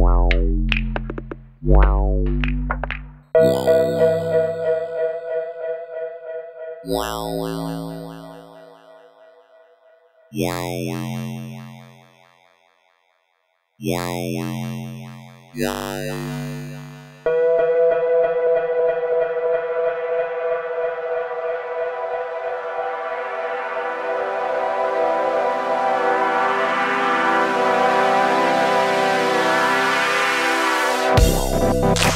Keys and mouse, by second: 1.6-2.3 middle drag, 3.1 middle click, 3.5 click, 4.3 KP_1, 4.8 KP_3, 6.4 shift+middle drag, 7.3 shift+d, 8.6 click, 9.0 s, 9.4 z, 10.3 s, 10.9 drag, 11.1 g, 11.8 click, 12.5 Tab, 12.9 middle click, 13.7 click, 14.7 e, 15.1 click, 15.8 e, 16.7 click, 17.9 e, 18.3 s, 19.9 shift+middle click, 20.4 middle click, 23.5 a, 25.3 g, 26.1 click, 26.7 middle click, 27.8 ctrl+KP_6, 28.7 ctrl+KP_Add, 30.0 click.